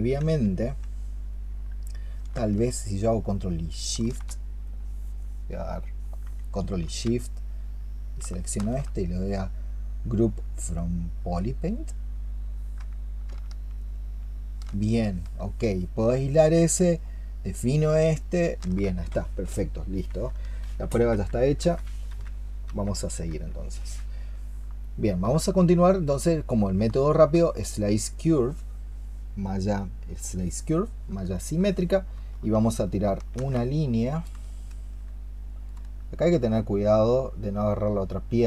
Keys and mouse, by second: 7.8 ctrl+shift+click, 13.7 ctrl+shift+click, 17.0 ctrl+shift+click, 18.1 ctrl+shift+click, 23.8 ctrl+z, 24.7 alt+click, 26.9 alt+click, 28.0 alt+click, 31.2 alt+click, 32.1 alt+click, 33.1 ctrl+shift+click, 34.2 space.